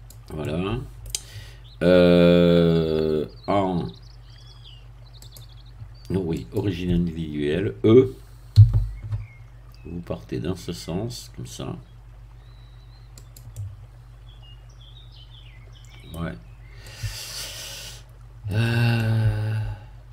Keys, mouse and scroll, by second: 0.4-1.5 middle drag, 5.2 click, 6.3 click, 8.5 e, 13.1-16.3 drag, 13.5-16.3 middle drag, 16.4-16.7 scroll up 1, 16.7-18.6 middle drag, 18.6 scroll down 1, 18.9-20.1 middle drag.